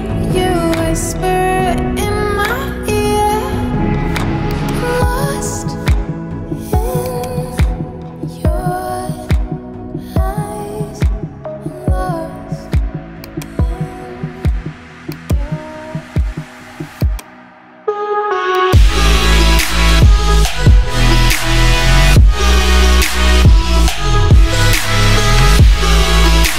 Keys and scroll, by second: 0.0-1.8 typing, 2.5 Return.